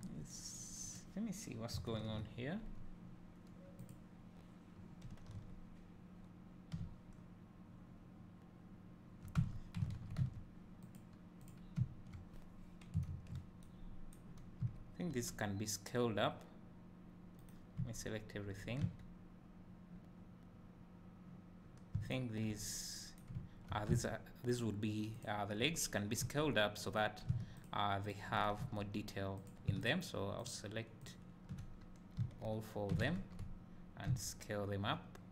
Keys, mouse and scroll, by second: 0.1 scroll up 1, 1.0 click, 1.9 ctrl+l, 2.6 scroll down 1, 3.9 click, 5.4 a, 6.8 `, 7.8 middle click, 9.6 Tab, 11.0 click, 11.9 `, 12.1-13.7 middle drag, 13.1 ctrl+l, 14.7 a, 15.3 s, 17.5 right click, 17.9 a, 22.1 shift+click, 25.2 shift+click, 26.2 s, 27.0 right click, 27.8 shift+click, 28.6 a, 29.6 drag, 32.3 a, 33.1 ctrl+z, 34.2 s.